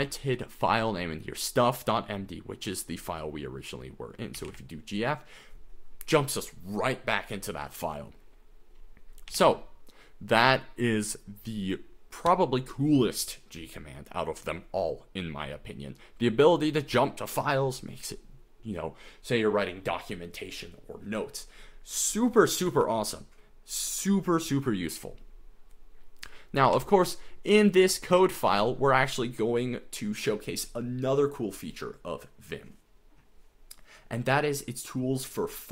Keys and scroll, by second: 0.0-0.6 typing, 4.1-5.0 typing, 9.1-9.8 typing, 26.6 typing.